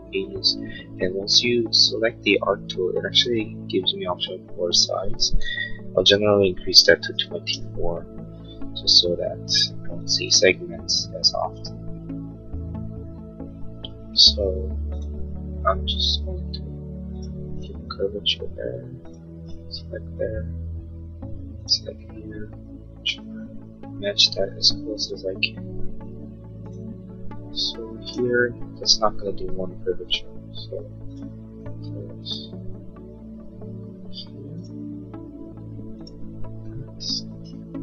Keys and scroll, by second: 6.9 2, 7.3 4, 7.6 Return, 29.9 Escape.